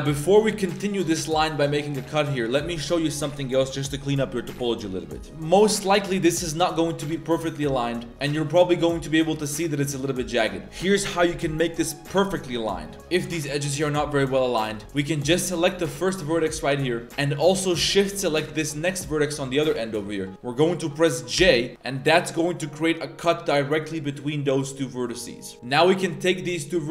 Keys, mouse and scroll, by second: 2.2-2.7 middle drag, 5.0 middle click, 5.3 middle click, 5.7 right click, 5.9 g, 6.6 right click, 7.2 g, 8.0 middle click, 9.6 right click, 10.4 right click, 12.8-13.2 middle drag, 13.2 ctrl+z, 13.2 g, 15.5 right click, 15.8 g, 17.0 a, 18.5 shift+right click, 20.1 middle click, 21.4 j, 21.7-24.2 middle drag, 24.8-25.5 middle drag, 25.6 middle click, 26.4-26.8 right drag.